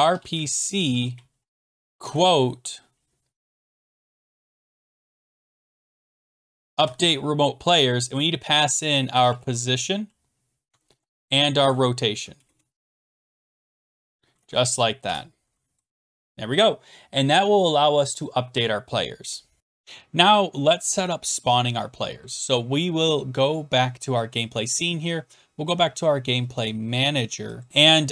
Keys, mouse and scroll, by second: 0.0-6.8 typing, 8.9-9.8 typing, 10.7 Tab, 12.3-14.5 typing, 15.0 Escape, 19.3-19.6 scroll, 19.6 click, 24.4 click, 27.6 click, 27.7 scroll down 3.